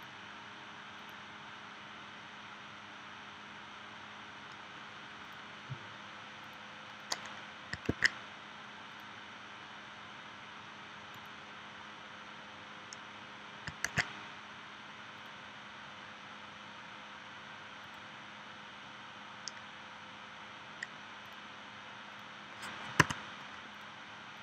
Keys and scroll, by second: 7.9 super+z, 13.8 super+z, 23.0 a.